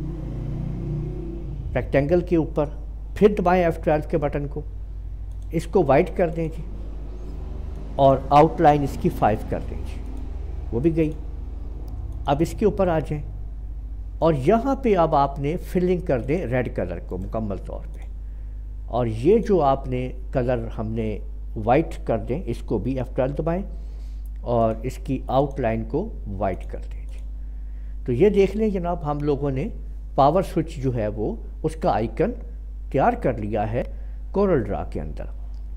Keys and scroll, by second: 3.3 F12, 9.2 5, 23.3 F12.